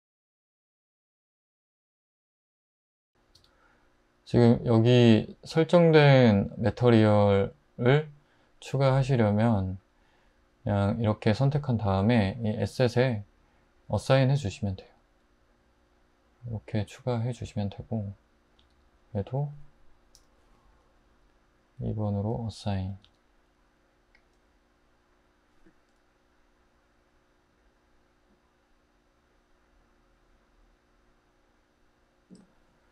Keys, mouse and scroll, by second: 1.6 super+z, 2.1 super+z, 2.9 super+z, 3.4 Tab, 8.8 Tab, 14.8 Tab, 18.6 Tab, 20.2 typing, 23.0 Tab.